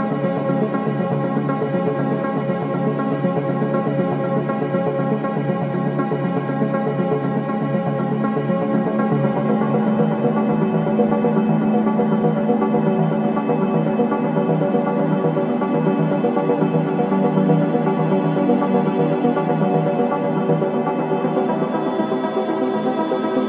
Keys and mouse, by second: 1.6 Tab, 4.4 /, 11.3 click, 19.2 click, 21.2 click, 22.8 r.